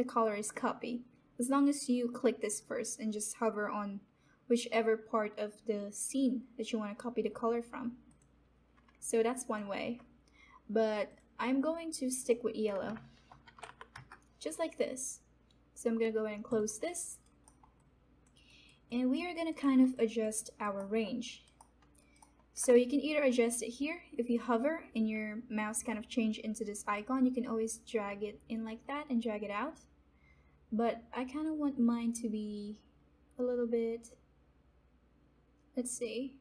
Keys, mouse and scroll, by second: 2.4 click, 8.0 click, 9.0 alt+click, 13.4 v, 16.4 click, 17.0 alt+right click, 17.4 alt+middle click, 17.7 alt+click, 18.4 alt+right click, 19.9 alt+click, 20.4 alt+right click, 20.7 alt+middle click, 21.2 alt+right click, 22.1 alt+middle click, 26.9-36.4 drag.